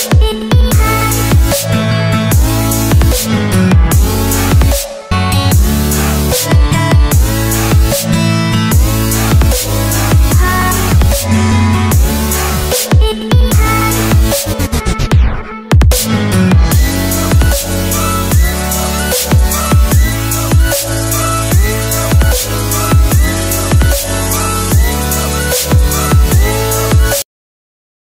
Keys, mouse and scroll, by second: 11.5 click, 22.2 ctrl+c, 22.8 click, 23.9 ctrl+v, 24.7 click, 26.0 right click, 26.8 click.